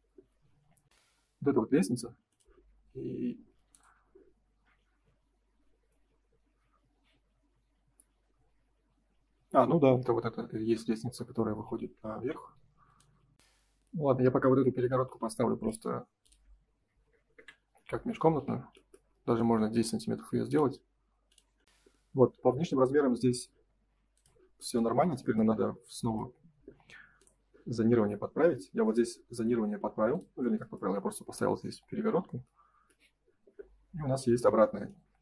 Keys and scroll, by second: 11.9 Print, 15.0 m, 17.3 Return, 19.4 F3.